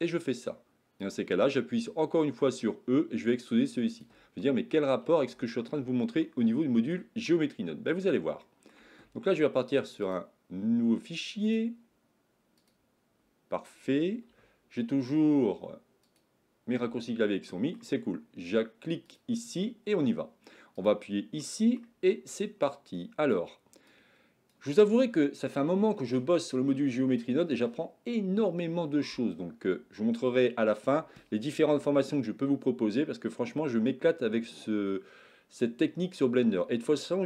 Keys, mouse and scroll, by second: 2.4 e, 4.5-5.5 middle drag, 6.2 shift+middle click, 7.3 middle click, 8.4 shift+middle click, 10.1-12.8 drag, 14.3 n, 16.8 n, 17.4 middle click.